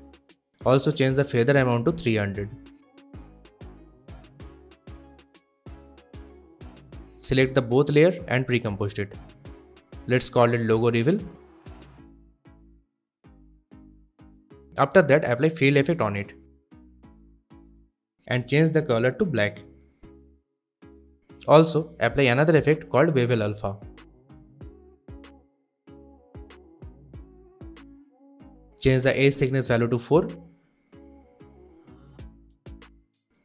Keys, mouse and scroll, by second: 1.3-2.3 typing, 2.7 Return, 4.0-7.0 drag, 7.1 right click, 8.2 click, 8.5-11.0 typing, 11.2 Return, 12.4-14.3 drag, 15.9-17.1 typing, 17.6 click, 22.2 click, 22.9-24.2 typing, 25.1 click, 26.2-27.5 scroll up 1, 27.5-29.1 scroll down 1, 29.8 click, 29.8-31.5 drag, 32.3 4, 32.4 Return.